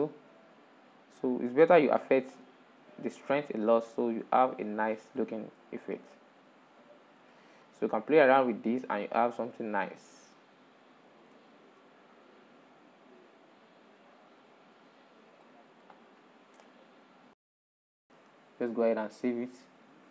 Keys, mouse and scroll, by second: 5.5-5.9 scroll down 4, 5.9 middle click, 6.8-8.2 drag, 8.2 middle click, 8.8-12.2 drag, 12.2 middle click, 12.8-16.3 drag, 16.3-16.7 scroll down 4, 16.7 middle click, 17.5 click, 18.5-20.1 middle drag.